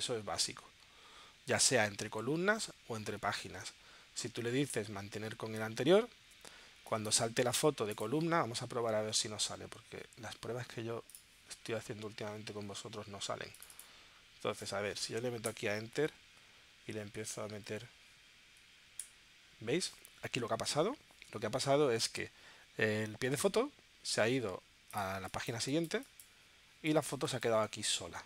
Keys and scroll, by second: 15.5 Return, 19.1 Return, 25.2 space.